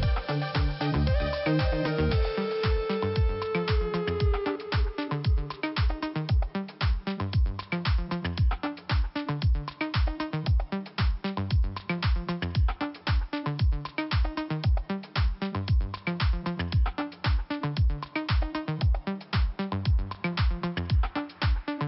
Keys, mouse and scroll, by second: 0.9 click, 2.4 click, 3.7 click, 6.8 click, 10.0 click, 10.0 click, 10.5 click, 12.8 scroll up 2, 13.8 click, 14.1 click, 14.2 click, 14.3 double click, 15.3 double click, 16.9 click, 16.9 click, 17.5 click, 19.0 scroll down 1, 20.3 click, 20.4 click, 20.7 click.